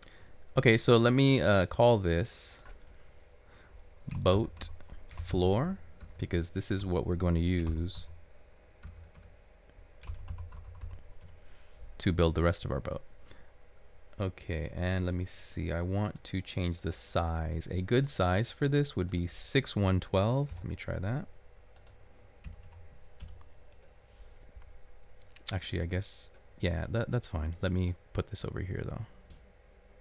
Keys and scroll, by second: 4.0-6.5 typing, 7.7-11.4 typing, 20.6 typing, 22.5-23.2 typing.